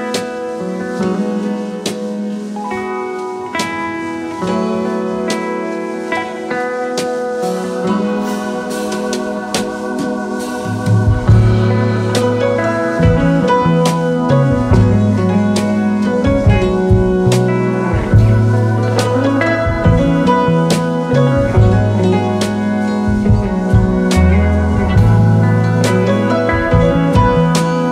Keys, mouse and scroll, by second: 0.0-1.6 typing, 3.0 space, 3.5-4.4 alt+scroll up 3, 4.4 space, 5.3 alt+scroll up 1, 10.4 v, 10.9 shift+click, 12.8 double click, 13.2 double click, 18.6 double click, 25.0-25.5 alt+scroll down 3, 25.6-26.1 alt+scroll up 5.